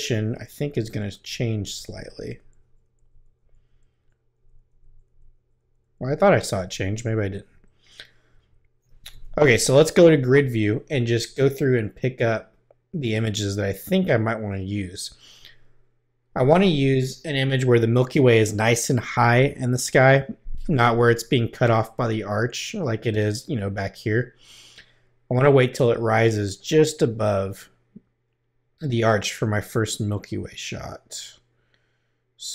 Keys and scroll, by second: 7.5 Left, 9.1 g.